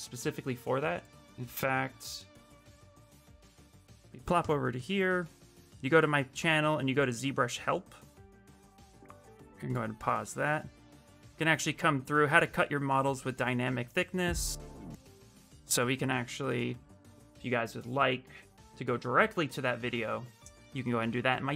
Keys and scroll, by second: 16.3 ctrl+c, 19.5 ctrl+v, 20.1 Return.